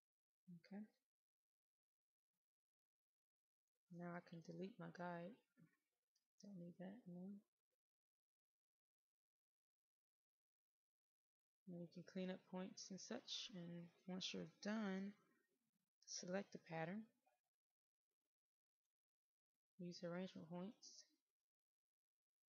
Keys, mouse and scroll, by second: 1.5 click, 4.2 Delete, 5.2-6.4 drag, 10.2-11.1 scroll up 1, 11.1 middle click, 11.9 click, 13.3-14.6 middle drag, 16.6 click, 20.1 right click, 21.3 click.